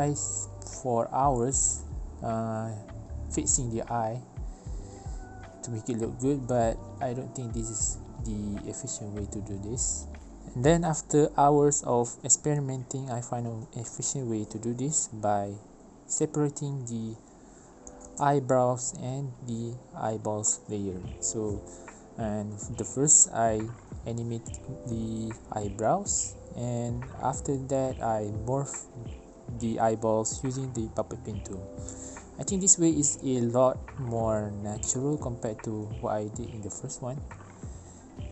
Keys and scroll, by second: 0.7 ctrl+z, 2.5 ctrl+z, 2.8 ctrl+z, 17.3 ctrl+z, 21.2 alt+shift+p, 26.3 ctrl+z, 29.3 ctrl+c, 29.7 ctrl+v, 29.7 space, 30.1 space, 30.8 ctrl+alt+space, 31.2 ctrl+alt+space, 32.9 space, 33.2 space.